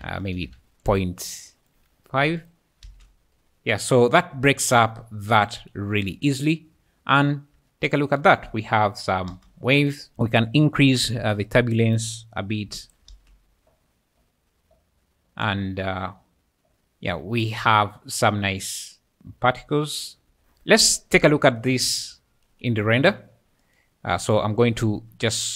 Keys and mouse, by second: 0.5 Escape, 0.8-2.4 drag, 2.9 space, 6.2 `, 6.7 `, 6.8 `, 7.2 `, 9.3 space, 11.4 shift+click, 12.8 shift+click, 13.1 space, 18.2-20.8 typing, 21.8 `, 22.8 `, 25.4 click.